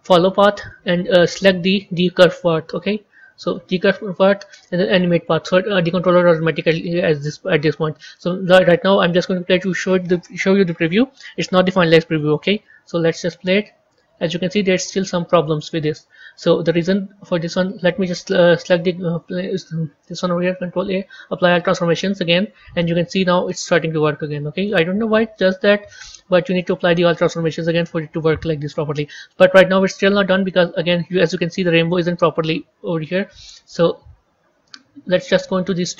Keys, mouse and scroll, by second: 0.1-2.4 drag, 5.0-15.3 drag, 16.6-18.5 drag, 21.1 ctrl+a, 22.7-27.6 middle drag, 27.6 KP_1, 30.0-33.0 drag.